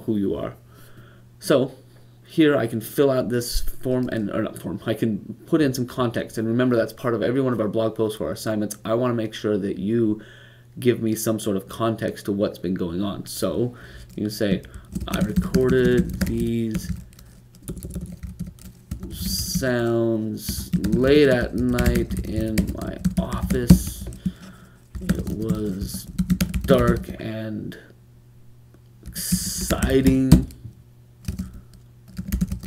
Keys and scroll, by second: 14.3-16.6 typing, 18.9-27.4 typing, 28.8-29.5 typing.